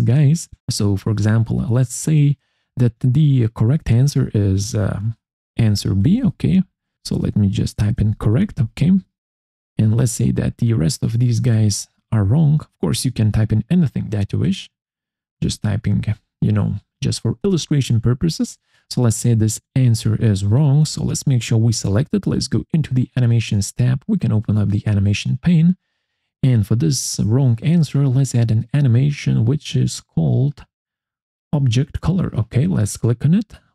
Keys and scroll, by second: 5.2-9.1 typing, 7.2 Caps_Lock, 11.1-12.7 typing, 13.6 ctrl+c, 16.0 ctrl+v.